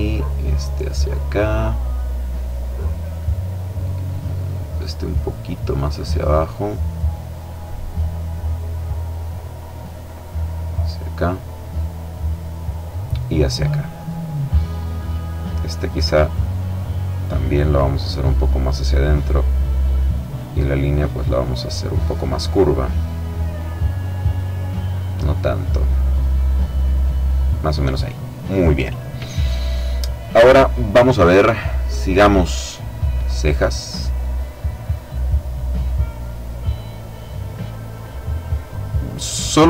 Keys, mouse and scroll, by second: 3.6-5.5 drag, 5.8 click, 8.7-11.1 drag, 11.3-12.9 drag, 13.1 middle click, 14.6 click, 15.7 click, 18.6-21.2 drag, 23.3-27.5 drag, 31.9 click, 34.5 click, 35.4 click, 36.6-37.9 drag, 37.9-39.0 drag, 39.1 click.